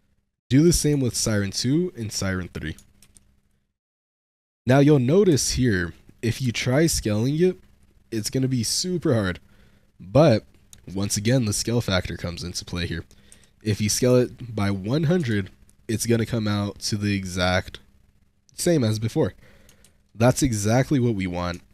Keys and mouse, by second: 0.2 click, 1.0 ctrl+a, 2.3 click, 2.9 ctrl+a, 4.2-4.5 shift+drag, 4.9 middle drag, 5.4 middle drag, 5.8 middle drag, 6.4 shift+middle click, 6.7 s, 13.2 1, 13.5 0, 14.0 0, 15.1 shift+middle click, 19.8 ctrl+z, 20.4 shift+middle drag, 20.6 shift+drag, 20.9-21.2 drag, 21.6-21.7 shift+drag.